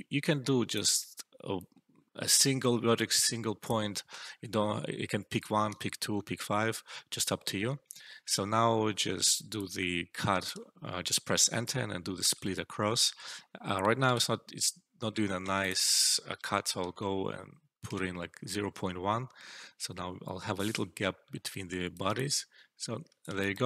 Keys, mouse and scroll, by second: 6.7 Return, 9.3 Return, 9.5-10.4 alt+drag, 12.2 ctrl+z, 14.0 ctrl+z, 15.5 click, 16.7-17.4 typing, 17.8 Return, 21.4-22.0 alt+right click, 22.0-23.6 alt+click, 23.3 alt+shift+right click, 23.5 alt+click.